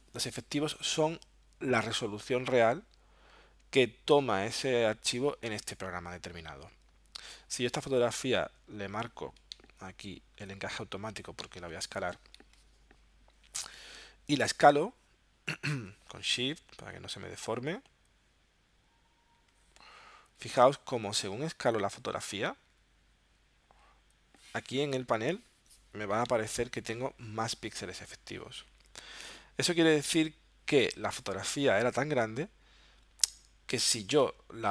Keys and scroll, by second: 9.5 alt+super+0, 26.2 alt+super+0.